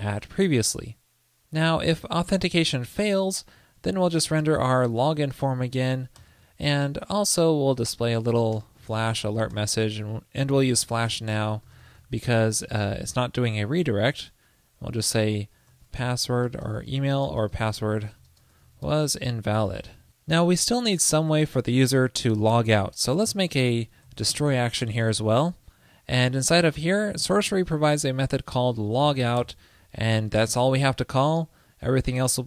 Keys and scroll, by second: 16.5 alt+BackSpace, 20.0 super+c.